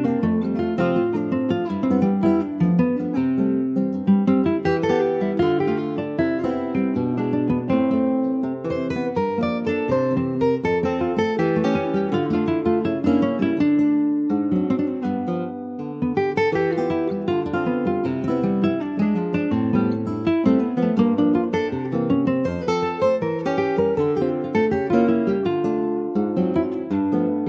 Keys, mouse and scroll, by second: 0.5 click, 2.2 middle click, 2.7 ctrl+b, 5.4 middle click, 5.7-7.0 scroll up 1, 7.0 s, 12.5 middle click, 12.7-13.2 scroll up 2, 13.3-14.3 middle drag, 14.3 shift+s, 15.5 shift+d, 16.5 middle click, 17.0 e, 17.9 alt+s, 21.6 middle click, 21.9 2, 22.4 click, 23.1 click, 23.7 alt+shift+click, 24.0-25.4 middle drag, 25.4 alt+shift+click, 25.9 middle click, 26.4 ctrl+b.